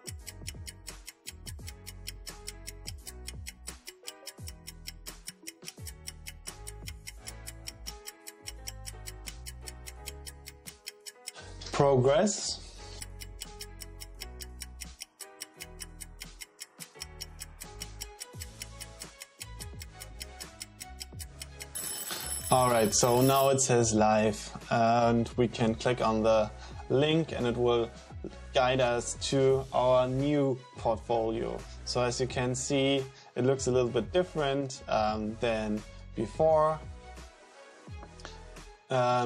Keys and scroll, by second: 10.6 super+r.